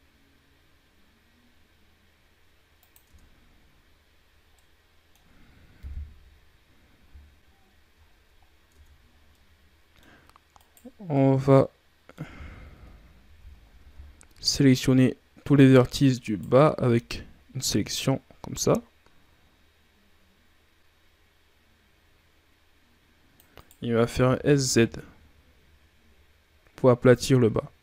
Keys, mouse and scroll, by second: 2.9 Tab, 3.4 scroll down 4, 4.4-5.7 middle drag, 5.7 KP_1, 6.9 scroll up 4, 7.9-8.4 ctrl+scroll up 5, 8.6 Tab, 9.2-10.5 middle drag, 10.5 right click, 11.0-12.6 middle drag, 12.6 KP_3, 13.4 ctrl+scroll up 2, 13.9 shift+scroll down 5, 14.9-15.3 scroll down 1, 15.3 z, 16.1 right click, 16.6 c, 24.1 s.